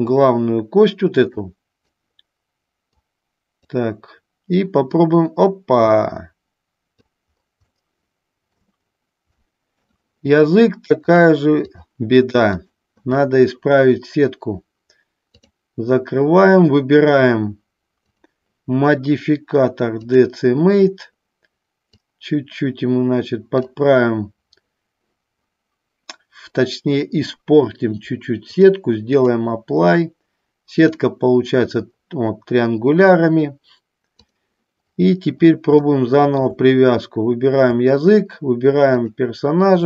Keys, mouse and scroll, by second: 3.1 click, 4.8-7.2 drag, 7.9 shift+middle click, 9.6 shift+middle click, 11.2 click, 12.8 click, 15.5 click, 18.2-20.3 drag, 22.2-23.7 drag, 28.6 click, 36.0 shift+middle click, 39.1 shift+click.